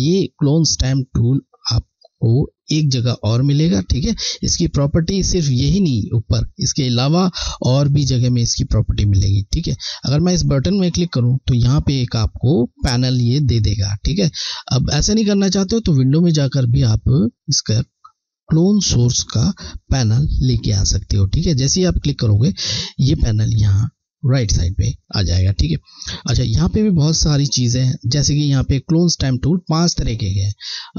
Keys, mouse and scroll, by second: 10.6 click, 15.8 click, 22.4 click.